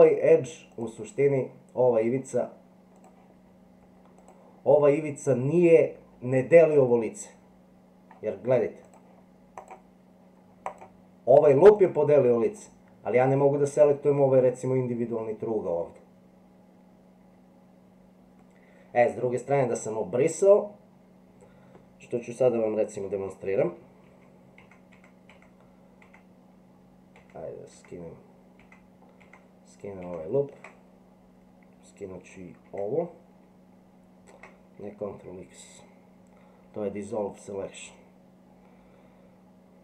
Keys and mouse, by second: 3.0 click, 4.2 click, 8.9 click, 9.6 click, 10.7 click, 11.8 click, 12.5 click, 24.1 ctrl+z, 24.6 ctrl+z, 24.9 ctrl+z, 25.3 ctrl+z, 27.2 ctrl+z, 27.8 ctrl+z, 29.2 ctrl+z, 30.0 ctrl+z, 32.7 ctrl+x.